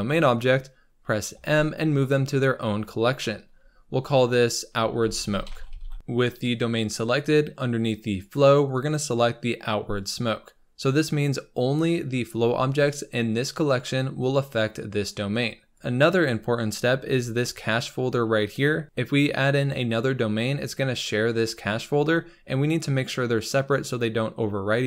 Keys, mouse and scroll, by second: 10.1-14.0 drag, 14.2-15.8 scroll down 4, 15.8-17.1 scroll up 4, 17.1-17.7 scroll up 1, 18.8 scroll down 4, 19.1-20.4 scroll up 4.